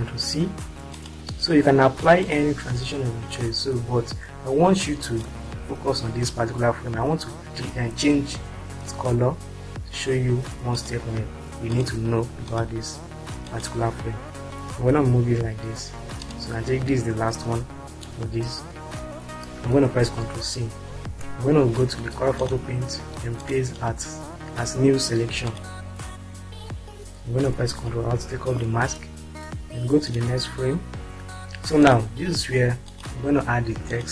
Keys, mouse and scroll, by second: 8.3 ctrl+r, 10.8 click, 12.8 ctrl+click, 14.7 Right, 19.8 ctrl+c, 28.1 ctrl+r, 33.2 click.